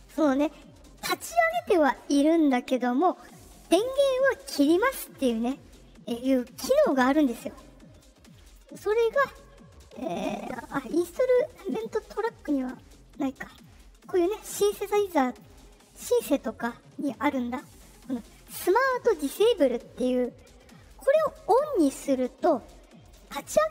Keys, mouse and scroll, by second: 8.4 click, 9.9-10.9 drag, 11.6 click, 13.9 click, 14.9 click, 16.0 click, 23.0 click.